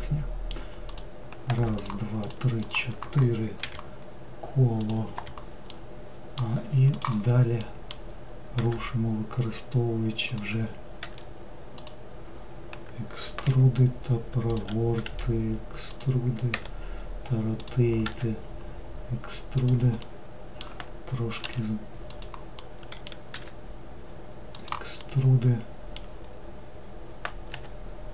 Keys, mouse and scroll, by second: 0.9 click, 1.8 shift+click, 2.3 shift+click, 2.7 shift+click, 3.6 n, 4.9 click, 5.2 n, 5.8-8.6 middle drag, 8.6 e, 11.1 e, 13.6 r, 14.6 w, 15.1 e, 16.6 r, 18.1 e, 20.1-21.5 middle drag, 21.5 s, 22.6 middle click, 23.4 e, 25.1-27.6 middle drag, 27.6 e.